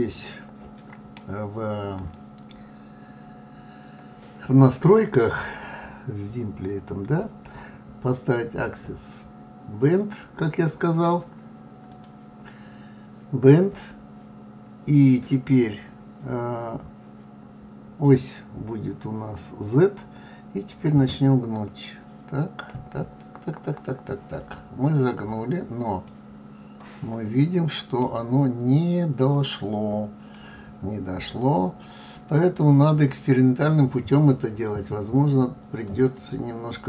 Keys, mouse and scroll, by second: 21.2 click, 26.5-29.0 middle drag, 29.0-30.0 scroll up 2, 30.0-31.4 middle drag, 31.4-31.8 scroll up 2, 32.4-34.9 scroll down 1, 36.3 click.